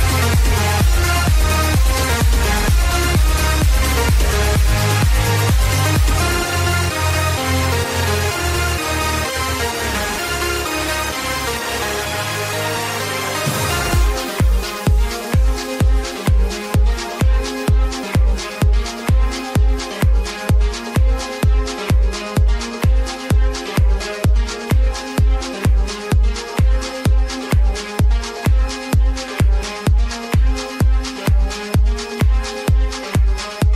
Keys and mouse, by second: 0.0-0.4 typing, 2.0 click, 4.4 click, 5.4-6.6 typing, 5.6 click, 7.7 click, 9.6 click, 11.9 click, 12.1 click, 13.1 click, 14.8 Return, 17.0 click, 18.7 click, 20.9 click, 21.7 click, 22.4 Return, 24.1 Return, 24.1 click, 25.0 click, 28.7 click, 31.1 click.